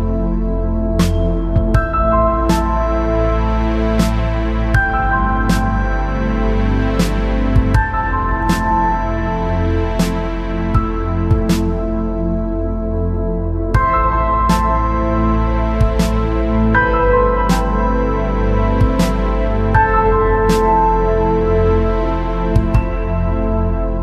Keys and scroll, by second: 16.2-16.9 space, 23.4-23.8 space.